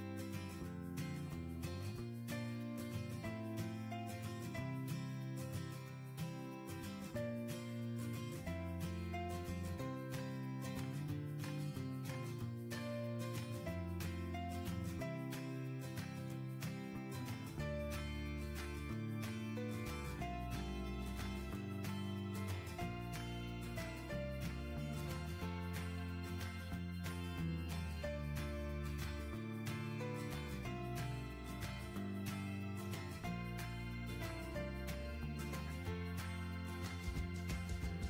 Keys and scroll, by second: 9.0 Left, 11.9 Left, 14.4 End, 30.5 Return.